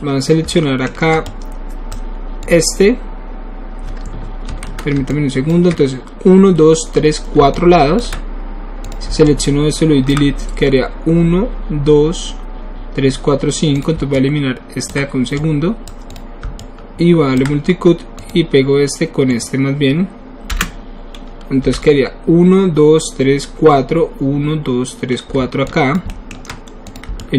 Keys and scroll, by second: 0.4 alt+w, 4.4 ctrl+z, 20.5 Return, 21.6 w.